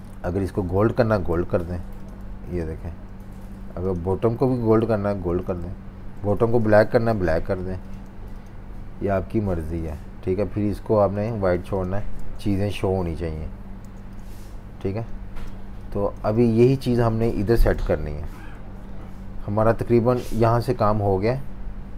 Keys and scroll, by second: 0.7 super+z, 1.3-3.1 typing, 4.8 i, 5.6 v, 6.3 super+z, 7.1-8.2 typing, 11.6 v, 12.2 z, 13.3 v, 13.8 z, 15.1-16.5 typing, 17.8 super+-, 18.0 super+-, 18.2 super+-, 19.9 v, 21.2 v.